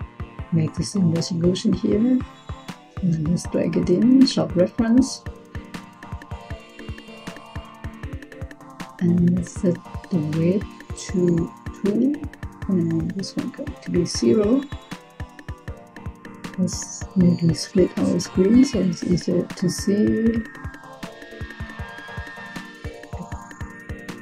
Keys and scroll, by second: 11.4 2, 13.3 0.